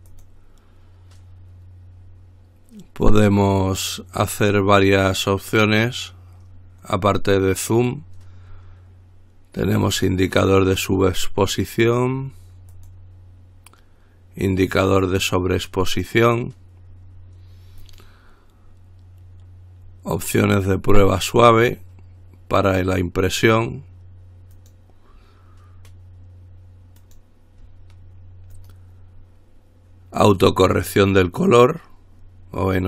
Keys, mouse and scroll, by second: 0.3 click, 10.1 click, 12.9 click, 14.8 click, 18.0 click, 20.6 click, 22.9 click, 24.8 click, 27.2 click, 28.8 click, 30.5 click.